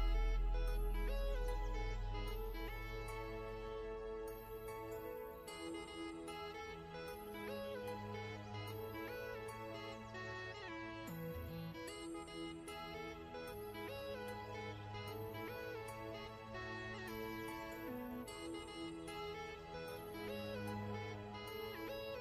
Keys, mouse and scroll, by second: 0.2 click, 2.3 click, 4.0 Left, 4.4 Down, 4.5 Left, 4.6 Down, 5.1 Left, 5.2 Down, 5.6 click, 8.1 click, 10.4 i, 10.9 click, 11.3 v, 12.0 click, 20.2-21.7 typing, 22.0 scroll up 1.